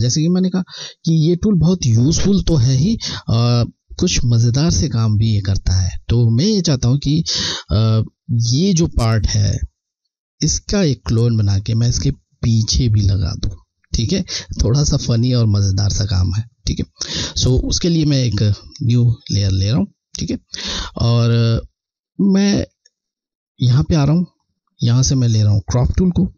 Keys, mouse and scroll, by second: 2.5 click, 16.2 alt+scroll down 1, 18.3 click, 20.9 alt+scroll down 1, 21.6-22.1 scroll, 22.2 scroll, 24.1 alt+scroll down 1, 24.5 click, 24.8 click.